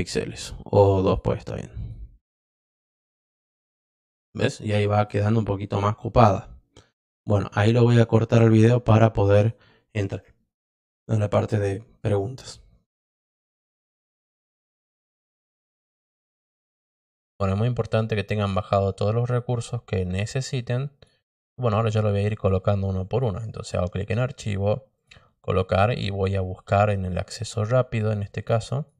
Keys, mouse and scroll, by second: 3.5 click, 4.6 click, 8.5 click, 14.7 click, 16.0 click, 17.1 click, 23.0 click, 24.9 click.